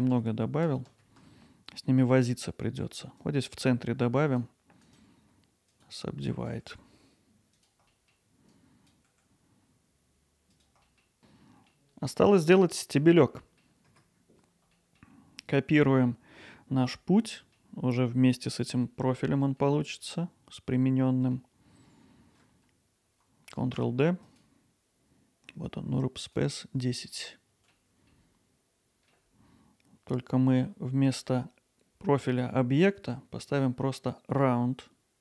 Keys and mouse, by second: 0.0 ctrl+z, 3.3-5.0 drag, 5.0-6.3 right drag, 6.3 click, 6.6 g, 7.5 click, 7.9 click, 8.1 g, 9.0 click, 9.1 g, 9.4 click, 9.6 g, 9.9 middle click, 10.2 alt+middle click, 10.4 middle click, 11.3 middle click, 12.2 middle click, 13.4 middle click, 13.9 Tab, 14.8 middle click, 16.2 middle click, 17.3 middle drag, 19.7-20.1 middle drag, 21.0-21.3 middle drag, 23.7 shift+d, 24.2-26.8 drag, 27.2-27.7 middle drag, 28.8 alt+middle drag, 33.5-35.2 drag.